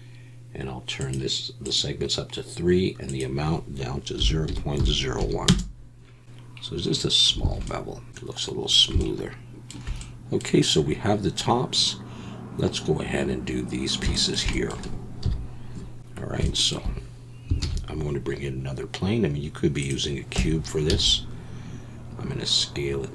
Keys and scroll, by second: 7.4 alt+a, 15.2 KP_1, 17.6 shift+a, 20.3 Tab, 20.9 s.